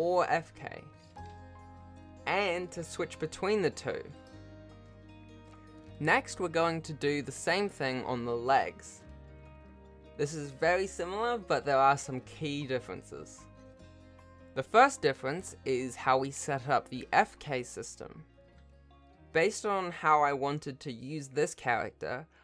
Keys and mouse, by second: 6.8 Tab, 8.1 shift+d, 10.4 shift+click, 10.8 shift+d, 12.6 shift+click, 13.5 shift+click, 14.4 F2, 17.1 BackSpace, 17.3 F3, 17.6 F3, 17.9-19.9 drag, 18.1 BackSpace, 18.3 F3, 18.8 o, 21.1 BackSpace, 21.3 F3, 21.6 ctrl+shift+BackSpace, 21.7 0.